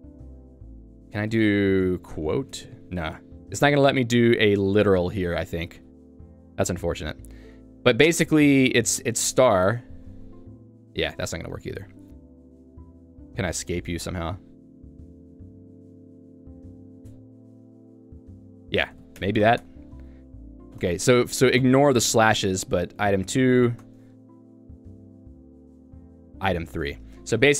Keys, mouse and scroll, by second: 17.4-22.6 typing, 23.7 o, 23.8 Return, 24.2 BackSpace, 25.2 Return, 25.5-27.5 typing, 27.3 Escape.